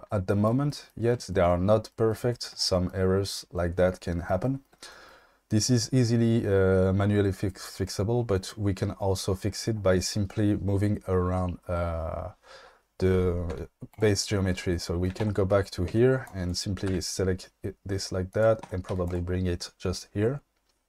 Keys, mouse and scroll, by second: 13.5 q, 15.2 Tab, 15.9 1, 16.3 click, 16.9 g, 18.6 Tab, 18.9 q.